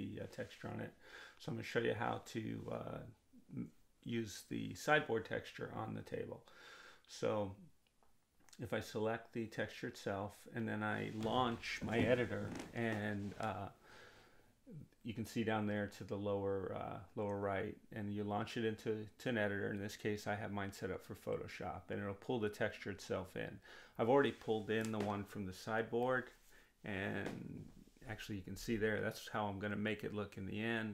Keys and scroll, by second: 9.9 space, 16.9 space.